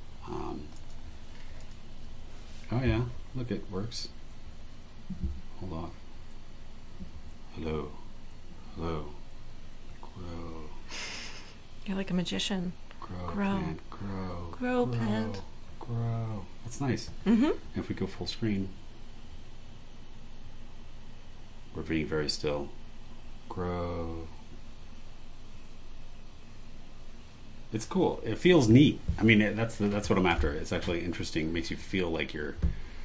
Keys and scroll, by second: 18.5 Escape, 28.5 Escape.